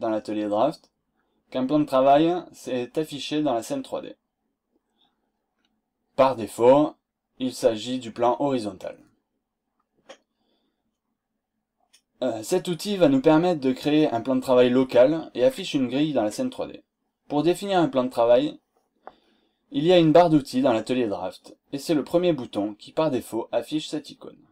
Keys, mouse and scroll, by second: 3.9-4.5 scroll up 2, 5.5 scroll down 2, 6.6 scroll up 2.